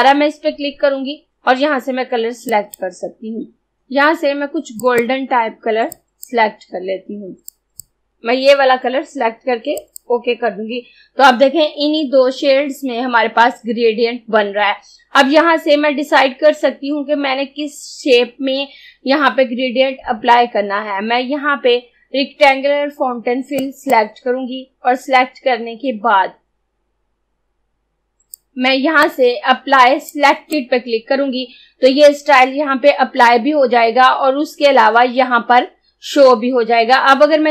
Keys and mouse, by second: 2.5 click, 9.8 click, 23.7 click, 28.4-33.1 drag.